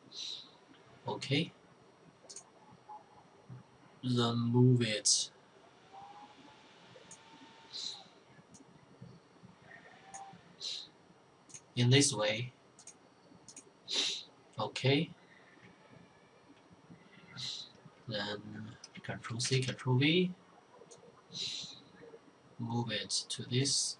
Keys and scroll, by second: 18.5 ctrl+c, 18.7 ctrl+v.